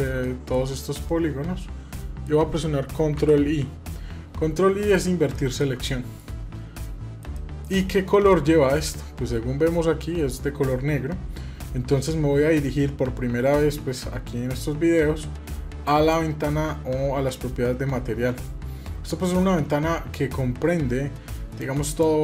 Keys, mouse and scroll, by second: 0.0 middle click, 0.6-2.0 middle drag, 4.3 ctrl+middle click, 5.1 ctrl+shift+middle click, 5.6-7.0 middle drag, 7.1 middle click, 8.2 scroll up 2, 8.8-10.2 scroll down 1, 15.6 click.